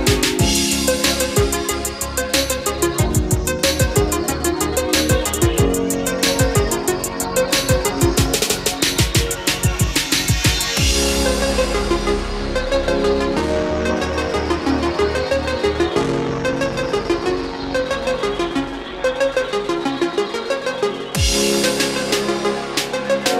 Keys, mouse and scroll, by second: 5.0-7.2 middle drag, 7.8 click, 10.6-16.3 middle drag, 16.5 scroll up 1, 19.5 scroll down 1, 20.1-20.4 scroll up 1, 21.1-23.3 drag.